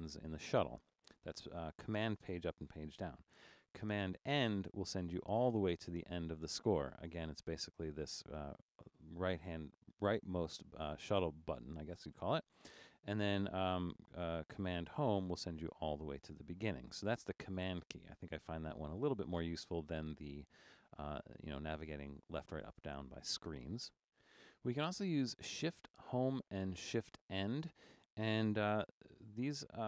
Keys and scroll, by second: 4.6 super+?, 15.1 super+?, 28.8 super+=, 29.3 super+=.